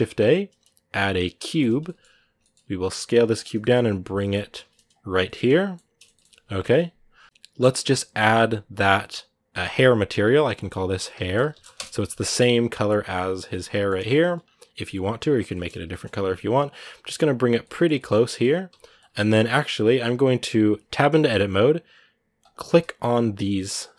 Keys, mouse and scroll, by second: 1.4 shift+a, 1.6 middle click, 1.9 scroll down 2, 2.2 shift+middle click, 2.5 s, 5.0-6.4 shift+middle drag, 6.4 KP_Decimal, 6.9-7.2 scroll down 2, 9.4-12.4 drag, 12.4 right click, 13.3 middle click, 14.0-15.3 scroll up 1, 15.3 shift+middle click, 15.6 g, 17.4-18.5 middle drag, 18.5 Tab, 18.8 middle click, 19.0-19.5 scroll up 1, 19.5-20.8 scroll up 1, 20.8-21.4 scroll up 1, 22.2-23.9 right drag.